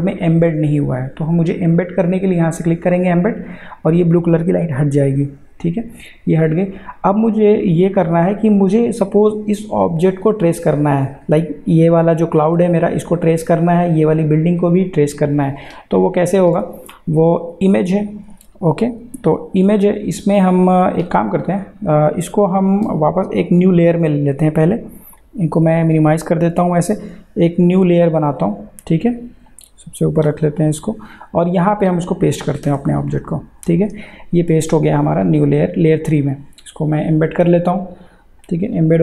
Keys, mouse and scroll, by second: 5.0 click, 7.1 click, 17.7 click, 20.0 click, 21.7 ctrl+z, 25.1 click, 28.3-31.6 drag, 32.7 ctrl+v, 37.4 click.